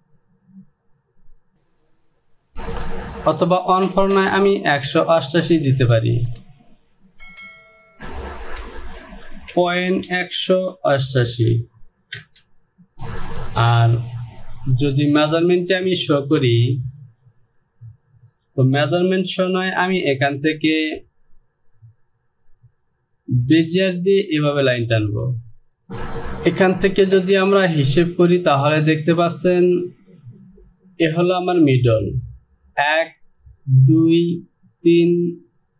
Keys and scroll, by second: 2.5 shift+f, 9.6 KP_Decimal, 10.1 KP_1, 11.0 KP_8, 12.3 Return.